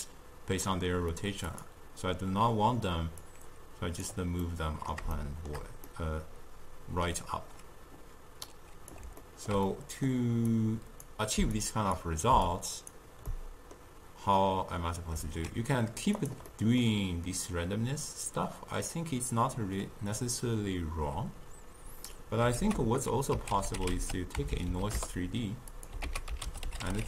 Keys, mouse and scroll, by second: 1.5 click, 3.3-4.5 drag, 4.5-8.5 middle drag, 8.5-9.1 drag, 9.2-10.5 ctrl+middle drag, 10.5-11.7 drag, 12.5 click, 13.3-15.4 middle drag, 15.4 ctrl+a, 16.5 middle click, 17.5 click, 22.7 ctrl+a, 24.6 Down, 24.7 Down, 26.1 ctrl+a.